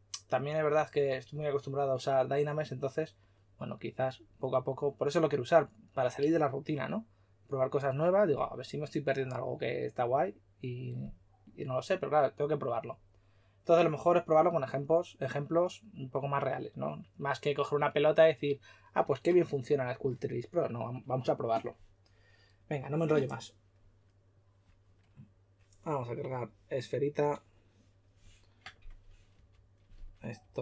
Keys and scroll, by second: 30.4 typing.